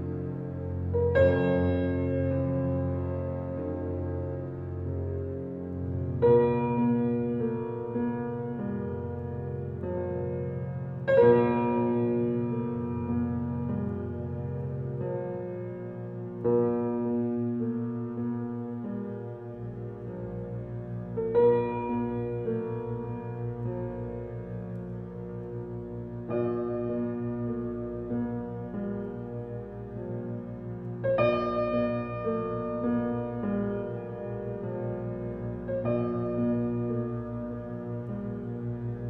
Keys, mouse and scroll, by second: 0.0-0.5 scroll down 1, 0.9 scroll up 1, 2.4 click, 4.5 click, 5.3 scroll down 1, 7.2 right click, 7.5 scroll down 1, 8.4 scroll up 1, 9.4 click, 9.8 scroll down 1, 12.2-12.7 scroll up 1, 13.8 click, 14.7-15.2 scroll down 1, 15.6 scroll up 1, 16.6 click, 16.9-17.3 scroll down 1, 18.0 scroll up 1, 18.5 right click, 18.8-19.1 scroll up 1, 20.1 click, 20.4 scroll down 1, 21.8-22.2 scroll up 1, 23.6 click, 25.7 click, 26.7-27.0 scroll down 1, 27.6-28.5 scroll up 1, 28.5 click, 28.9-29.5 scroll down 1, 29.5 right click, 29.8-30.2 scroll down 1, 31.0 scroll up 1, 32.0 click, 32.3 scroll down 1, 33.5 scroll up 1, 35.3 click, 37.4 scroll down 1, 38.2 click, 38.5-39.0 scroll down 1.